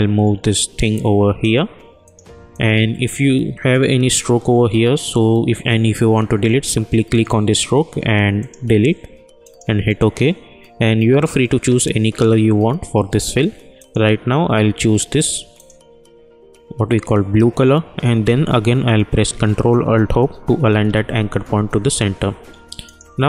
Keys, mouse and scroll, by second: 7.1 click, 13.7 click, 19.2 ctrl+Num_Lock, 19.2 click, 20.6 ctrl+alt+Home, 22.8 click.